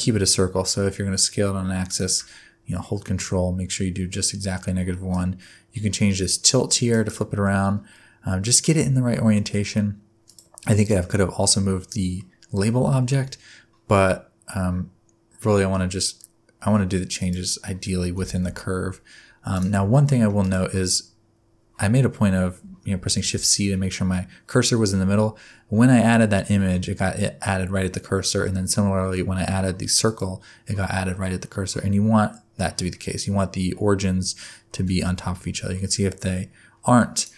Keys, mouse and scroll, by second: 5.1 click, 7.4 middle click, 8.8 Tab, 9.1 middle click, 10.3 click, 10.6 scroll down 1, 10.6 middle click, 10.6-11.9 scroll up 1, 12.2 middle click, 12.9 shift+middle click, 13.2 middle click, 17.2 click, 18.1 g, 19.9 shift+middle click, 20.4 click, 23.2 shift+c, 30.0 click, 34.8 g.